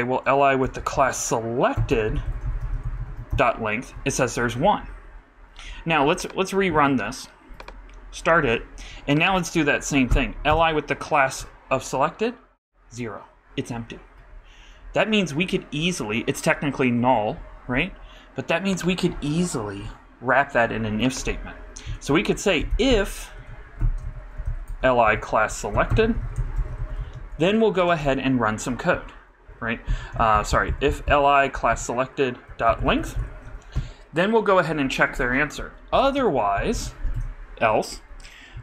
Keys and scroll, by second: 0.6 alt+., 3.0 super+d, 3.0 super+Right, 3.3 super+Return, 22.5-24.5 typing, 27.0 super+d, 27.0 super+Right, 27.7 shift+super+[, 28.0 shift+Return, 30.1 alt+Up, 36.8 shift+[, 37.1 shift+Return.